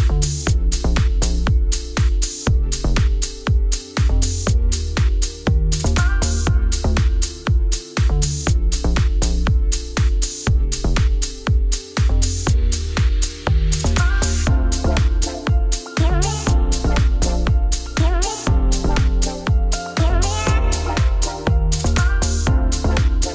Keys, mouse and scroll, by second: 0.0 shift+click, 0.3 click, 0.4 z, 0.7 click, 0.8 shift+click, 1.2 ctrl+;, 1.3 ctrl+l, 2.0 click, 2.2 click, 2.3 right click, 2.7 click, 2.8 right click, 3.3 click, 3.6 click, 4.4 click, 5.0 click, 5.4-6.5 shift+drag, 6.5 scroll down 5, 6.6 click, 6.8-8.0 middle drag, 9.0 scroll down 1, 9.2 middle click, 9.6 click, 10.5 KP_Divide, 10.9 shift+middle click, 11.3 scroll up 1, 11.4 click, 11.7-12.9 middle drag, 13.0 scroll down 2, 13.2 shift+middle click, 13.5 shift+click, 13.9 ctrl+l, 14.5 scroll up 1, 14.9 click, 15.1 right click, 15.5 click, 15.6 click, 15.7 Tab, 16.0 Tab, 16.3 click, 16.7 shift+click, 17.0 ctrl+l, 18.2 click, 18.4 right click, 18.8 click, 19.0 scroll down 3, 19.3 ctrl+s, 19.5-21.1 middle drag, 21.1-22.3 scroll up 1, 22.8 KP_Divide.